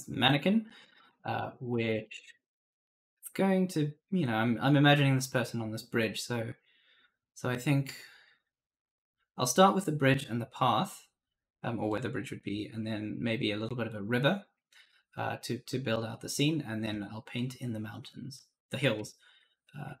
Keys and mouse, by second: 0.0-0.6 typing, 0.5 right click, 1.0 alt+Tab.